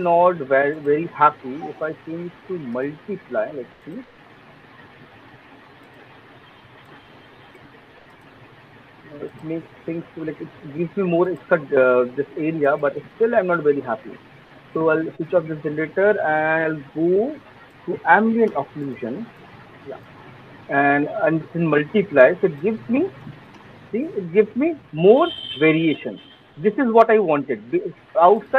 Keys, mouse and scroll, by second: 1.0-9.4 alt+click, 1.9 click, 3.3 click, 4.2 alt+right click, 4.5 alt+middle click, 5.6 click, 5.9 click, 7.0 click, 7.6 click, 8.0 click, 8.4 click, 8.8 click, 9.2 click, 9.9 click, 10.0 click, 11.7 alt+middle click, 12.2 alt+click, 15.1 click, 15.6 click, 17.9 click, 22.2 alt+click, 22.8 click, 24.0 click, 24.6 click, 25.2 click, 25.4 click, 25.8 click, 27.5-27.9 alt+click.